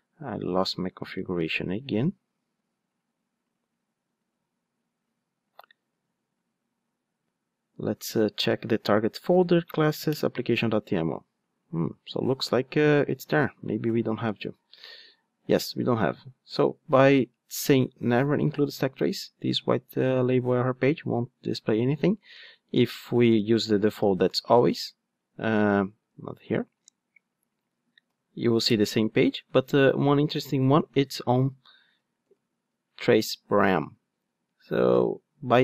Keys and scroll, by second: 8.8 Right, 9.1 Down, 9.4 Right, 9.6 Down, 28.7 Return.